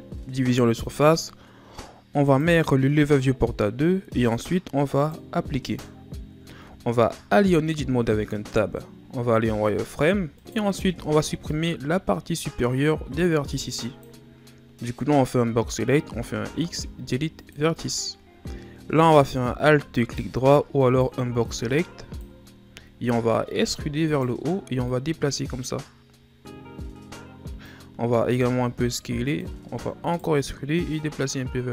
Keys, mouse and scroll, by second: 2.3-6.9 drag, 6.9-7.7 shift+scroll up 3, 7.7 Tab, 9.6 z, 10.4 right click, 10.9 b, 16.2 x, 19.1 alt+right click, 20.0 alt+right click, 20.9 right click, 21.2 b, 22.9-23.6 shift+scroll up 4, 23.6 e, 24.9-27.9 drag, 28.3 s, 30.9-31.7 drag.